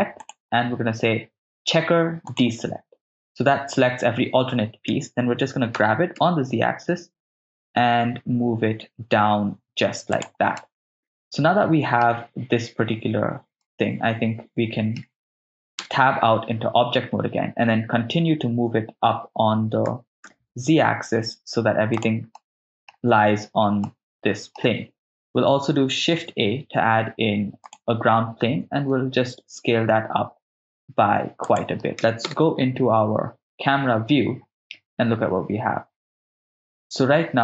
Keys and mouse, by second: 0.2-2.5 drag, 5.8 g, 6.1 z, 10.2 ctrl+click, 10.6-12.0 middle drag, 13.7-15.0 middle drag, 15.9 Tab, 18.7 f, 19.9 g, 20.2 z, 21.9 ctrl+drag, 22.4-22.9 middle drag, 23.8-24.6 middle drag, 26.2 shift+a, 28.7 s, 31.4 ctrl+click, 32.3 KP_0.